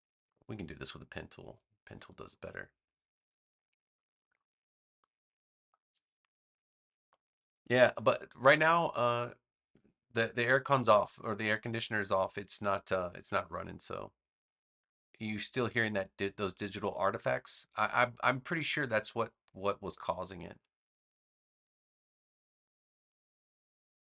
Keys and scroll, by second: 0.1 super+z.